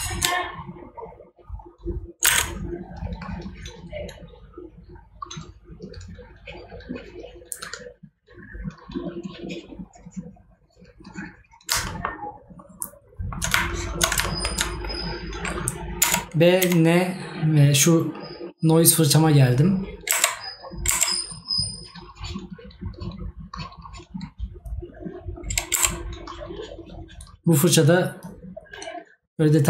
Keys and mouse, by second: 11.9 right click, 14.3 right click.